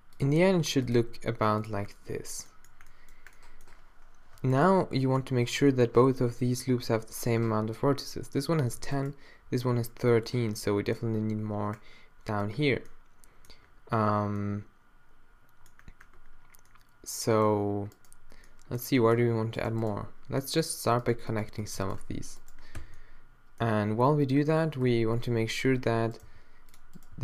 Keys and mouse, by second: 0.3 e, 1.0 e, 4.6-10.8 middle drag, 15.8-17.9 drag, 17.9-20.1 middle drag, 21.6 f, 22.8 f, 23.0-24.8 drag, 24.8 f, 26.1 click, 26.2 g, 26.8 click, 27.1 g.